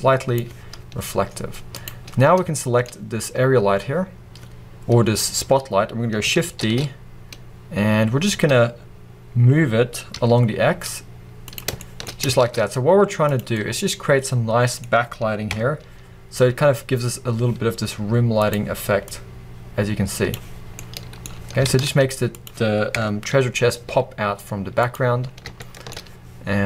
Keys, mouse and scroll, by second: 2.7-6.7 middle drag, 6.7 shift+d, 11.9 click, 12.5 shift+d, 16.2-17.4 scroll up 2, 17.4-18.3 scroll up 1, 18.3-19.1 scroll up 1, 19.1-19.5 scroll up 1, 19.5-20.8 drag, 20.8-22.9 middle drag, 21.9 shift+d, 23.2 KP_0, 24.3 g, 25.3 middle click, 26.1-26.6 middle drag.